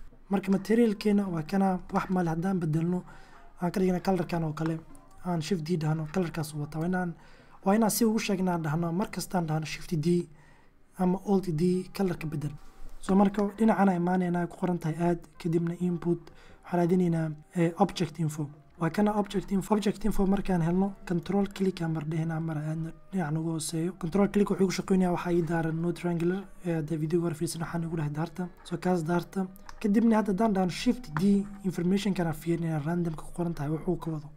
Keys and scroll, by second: 4.3 shift+d, 5.9 x, 24.1 super+,, 33.8 shift+d.